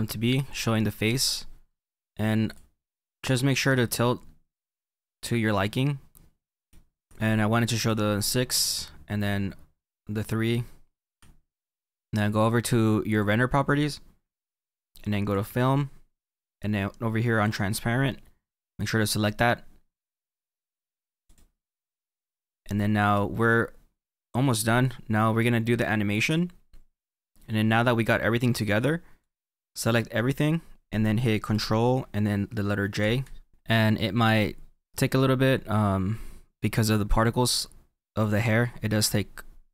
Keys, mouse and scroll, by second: 2.5 click, 6.1 click, 6.5 middle click, 10.6-17.4 shift+middle drag, 11.2-17.4 scroll down 1, 17.4-22.2 drag, 23.2 shift+middle click, 29.9 click, 38.1 click.